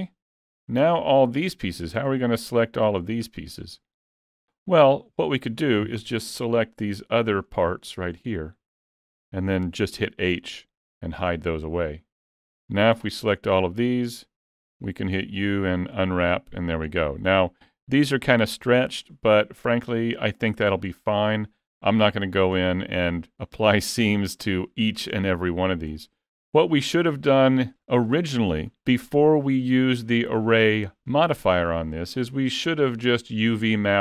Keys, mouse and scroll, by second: 0.3 middle click, 2.2 shift+middle click, 2.7 middle click, 3.0 scroll up 2, 3.3 shift+middle click, 3.8-4.3 scroll down 2, 4.3 middle click, 4.6 middle click, 6.1 l, 7.1 l, 7.5 middle click, 8.5 l, 8.9 middle click, 10.3 h, 11.4 middle click, 13.0 a, 13.5 middle click, 15.2 u, 17.4-18.2 scroll up 1, 19.1 middle click, 19.1-19.6 scroll up 1, 21.1-22.0 scroll up 1, 22.0 scroll up 2, 22.2 middle click, 24.9-25.2 scroll down 3, 25.2 middle click, 27.0 alt+a, 32.1-32.5 scroll up 2, 32.5 middle click.